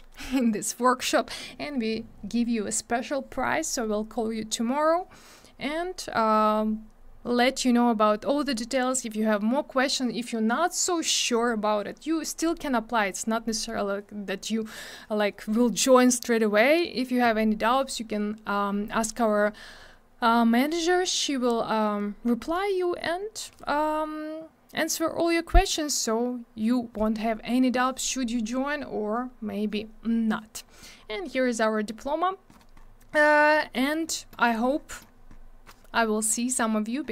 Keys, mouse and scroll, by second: 30.9 scroll down 1, 32.2-32.5 scroll up 2, 32.8 scroll up 1, 34.8 scroll up 1, 35.4 scroll up 1, 36.6 scroll up 1.